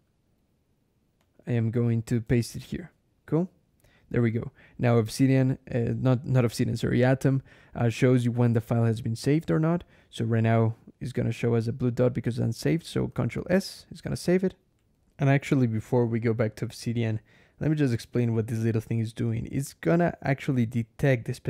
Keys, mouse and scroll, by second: 1.0 click, 1.7 click, 2.3 ctrl+shift+v, 3.2-4.0 scroll up 3, 13.0 ctrl+s, 14.6 alt+\, 17.6 click, 18.2-19.5 drag, 20.1 click.